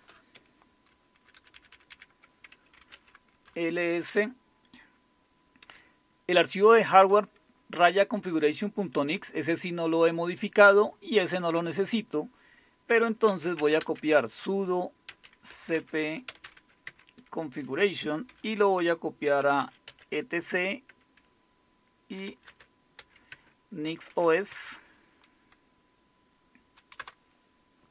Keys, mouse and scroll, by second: 0.9 ctrl++, 1.1 ctrl++, 1.4 ctrl++, 1.5 ctrl++, 1.7 ctrl++, 2.6-3.4 typing, 13.2-16.9 typing, 18.3-20.4 typing, 22.0-24.5 typing, 27.0 Return.